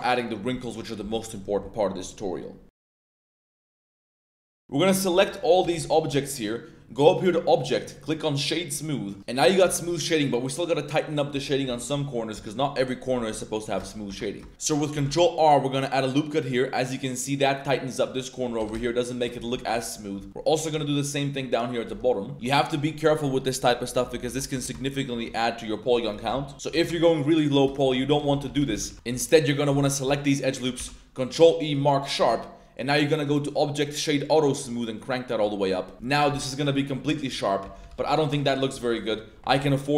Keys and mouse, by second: 0.5 middle drag, 1.0 middle click, 4.9 middle drag, 5.1 a, 5.3 middle click, 5.6 a, 5.8 a, 6.0 b, 7.2 click, 7.6 click, 8.8-9.1 middle drag, 9.2 middle drag, 9.5 shift+middle click, 9.8 Tab, 10.3 middle drag, 10.8-11.2 middle drag, 11.3 Tab, 11.7 shift+middle drag, 12.4 middle drag, 12.9 click, 13.5 drag, 13.8 shift+click, 14.2 Tab, 14.2 click, 14.4 shift+click, 14.9 ctrl+r, 18.6 g, 18.7 g, 19.1 shift+click, 19.3 Tab, 19.5 middle click, 20.3 Tab, 20.5 ctrl+r, 21.7 click, 21.9 Tab, 22.0 middle drag, 22.3 Tab, 24.2 Tab, 24.5 Tab, 24.8 shift+middle click, 25.1 Tab, 26.5 Tab, 26.7 g, 27.5 shift+click, 28.0 Tab, 28.3 ctrl+z, 28.4 ctrl+z, 28.6 ctrl+z, 28.7 ctrl+z, 28.9 ctrl+z, 29.1 2, 29.9 alt+shift+click, 30.7 ctrl+e, 32.2 Tab, 32.7-34.2 drag, 34.9 click, 36.4-36.9 middle drag, 37.1 middle click, 37.6 ctrl+z, 37.8 ctrl+z, 37.9 ctrl+z, 38.6 middle click, 39.5 ctrl+b.